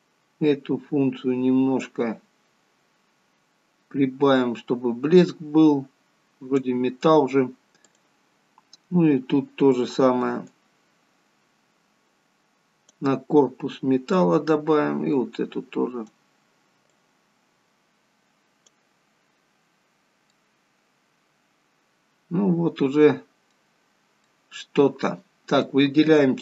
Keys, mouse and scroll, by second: 1.2 click, 7.8 click, 10.6 click, 14.2 click, 16.9 click, 19.4-20.6 scroll down 1, 20.6 middle click, 20.6 scroll up 3, 24.0 scroll down 3, 24.2 scroll up 1, 24.4 middle click.